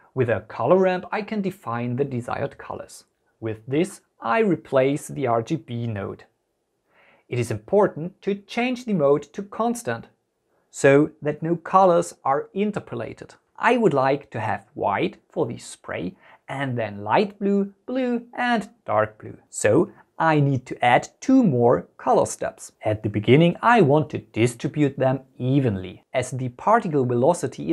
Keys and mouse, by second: 0.8 shift+a, 6.2-8.4 drag, 9.4-10.8 drag, 14.0 click, 14.4 click, 15.4-17.2 drag, 18.7 click, 19.0 click, 21.5 click, 23.7 click.